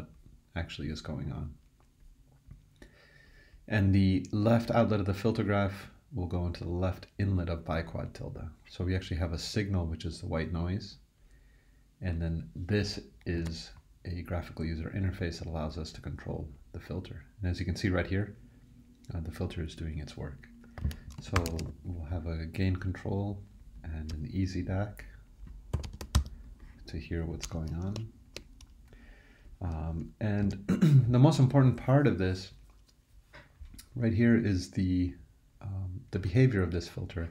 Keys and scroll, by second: 13.4 super+e, 20.8 super+e, 20.9-22.0 typing, 23.7 typing, 25.5-26.6 typing, 30.4 super+e.